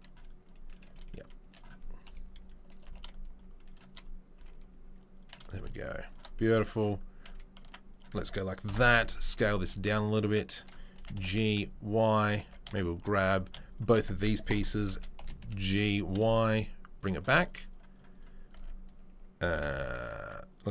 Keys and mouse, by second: 0.8 s, 2.0 KP_3, 2.8 g, 4.3 s, 5.5 g, 6.7 right click, 6.8-7.9 middle drag, 7.6 Tab, 7.9-10.5 ctrl+right drag, 8.7 ctrl+l, 9.6 s, 10.5-14.1 shift+middle drag, 10.9 g, 12.4 Tab, 13.1 Tab, 14.1 ctrl+click, 14.5 ctrl+k, 14.5 ctrl+l, 14.6 middle click, 14.9 d, 15.2 g, 17.4 Tab, 17.6 click, 18.1 click, 18.5 Tab, 19.5 g.